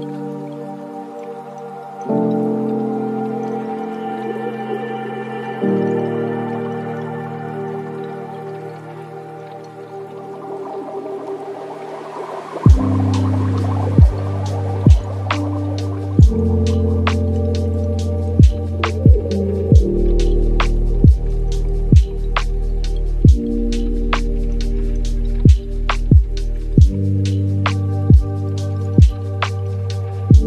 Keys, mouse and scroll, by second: 0.9-4.0 shift+drag, 6.5 space, 7.5 space, 8.1-15.5 drag, 16.1-18.2 drag, 18.2-18.9 middle drag, 18.9-19.3 scroll up 2, 19.3 middle click, 20.1-23.2 drag, 24.4-26.1 middle drag, 26.1-27.6 drag, 27.6 space, 28.2 space, 28.8-30.4 drag.